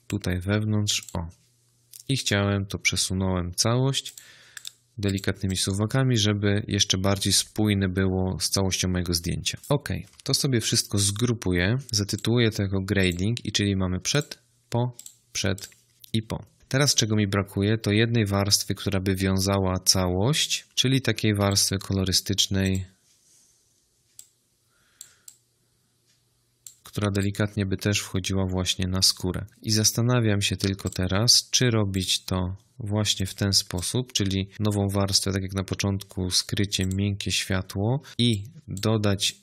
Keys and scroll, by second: 10.5 ctrl+g, 11.8 Return.